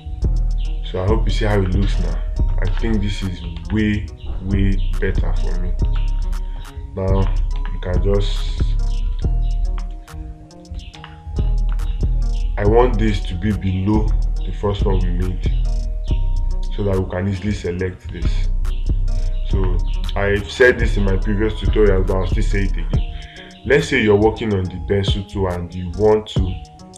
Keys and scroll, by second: 3.1 space, 4.0 space, 6.4 space, 8.0 space, 11.4 space, 21.0 space.